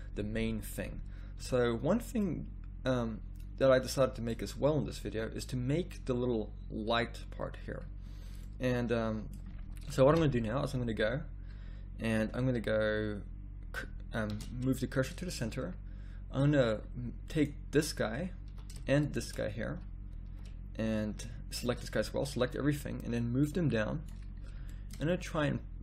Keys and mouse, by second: 1.4 z, 8.1-10.1 middle drag, 10.1 KP_1, 12.2-13.2 middle drag, 14.3 shift+s, 15.5 middle click, 16.6 middle click, 17.3-19.0 drag, 18.1 z, 18.5 z, 19.6 z, 20.3 z, 22.0 z, 22.4 click.